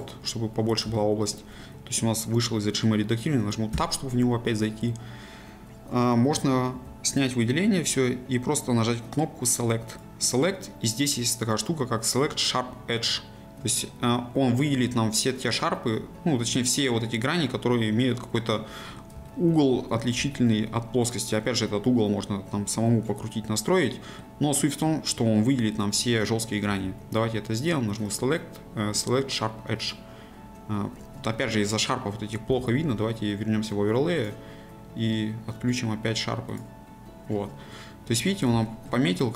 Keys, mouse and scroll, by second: 0.9 shift+middle click, 1.5-3.7 scroll up 1, 3.7 Tab, 4.5-4.8 scroll up 1, 6.7 a, 18.5-19.7 middle drag, 19.7 scroll up 1, 20.3 shift+middle click, 21.1 click, 21.4-24.4 middle drag, 24.4 scroll down 1, 26.7 a, 29.9-31.0 drag, 31.0 z, 36.5 click, 37.3-37.7 scroll down 1, 37.7-39.3 middle drag.